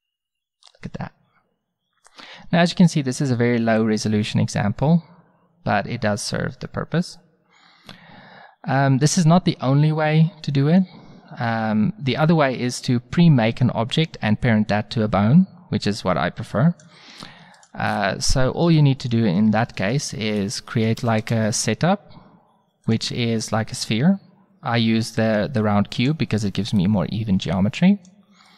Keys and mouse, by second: 0.7-2.7 middle drag, 17.6-19.6 middle drag, 21.0 a, 26.8-28.5 drag.